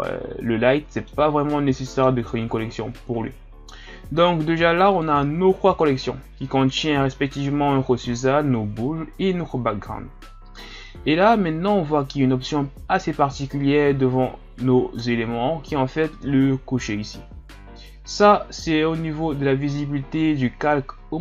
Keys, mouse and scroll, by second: 1.7-4.8 middle drag, 4.9 click.